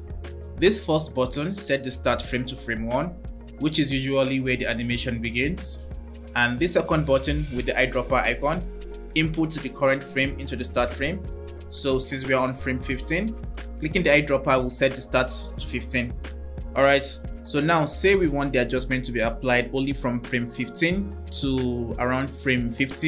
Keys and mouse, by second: 6.5 click, 14.2 click, 19.9 click.